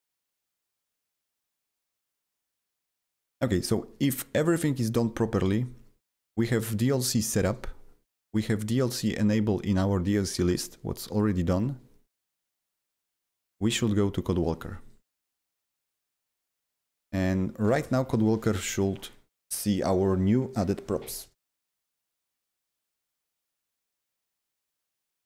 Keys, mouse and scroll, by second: 0.2 click, 1.1 click, 3.2 click, 5.3 click, 6.5 click, 10.4 click, 11.1 click, 12.6 click, 13.7 click, 24.7 click.